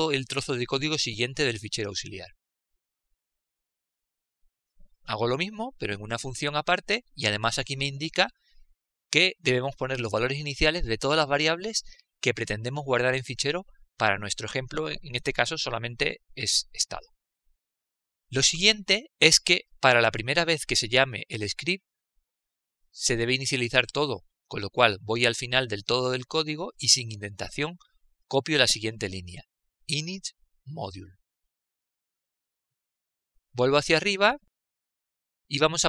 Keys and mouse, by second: 3.2 ctrl+v, 6.4 click, 8.6 click, 10.8-14.5 drag, 19.2 click, 25.7-29.2 drag, 29.2 Return, 31.0 ctrl+v, 32.6 KP_7, 35.4-35.8 middle drag.